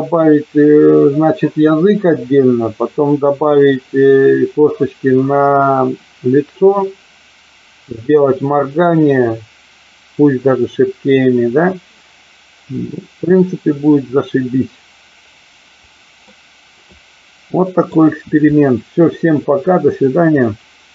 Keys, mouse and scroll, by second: 16.3-17.8 middle drag.